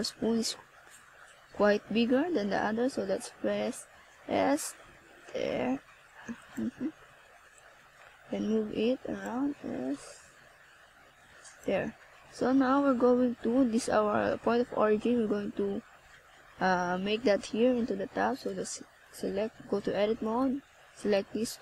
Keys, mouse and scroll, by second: 0.2 shift+right click, 0.9 a, 1.5 right click, 1.9 shift+right click, 2.4 shift+right click, 2.8 shift+right click, 3.5 a, 3.7 right click, 4.4 shift+right click, 6.0 shift+right click, 8.6 ctrl+KP_Add, 11.1 click, 12.2 middle click, 13.5 a, 14.2 middle click, 15.5 right click, 16.0 shift+right click, 16.7 right click, 17.7 shift+right click, 18.7 shift+right click, 19.3 right click, 21.2 middle click.